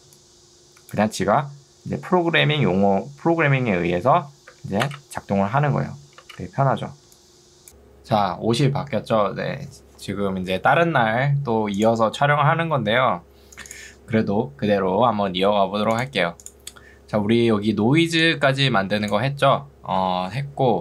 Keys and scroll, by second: 0.0 ctrl+2, 4.6 Escape, 5.0 space, 7.0 ctrl+2, 17.9 ctrl+2, 20.1 Escape.